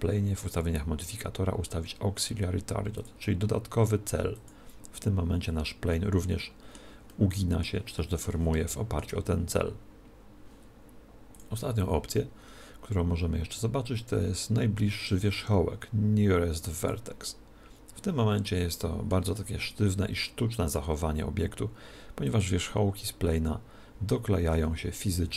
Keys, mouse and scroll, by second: 3.0 click, 5.9-11.4 middle drag, 11.4 click, 18.5-21.2 middle drag, 22.3 click, 25.1 z.